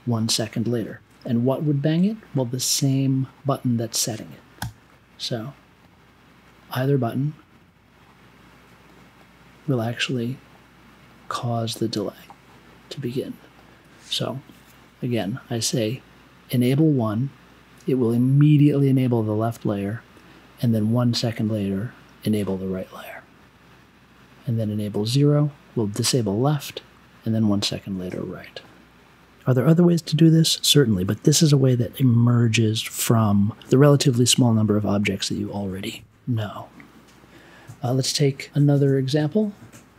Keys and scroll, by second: 4.5 b.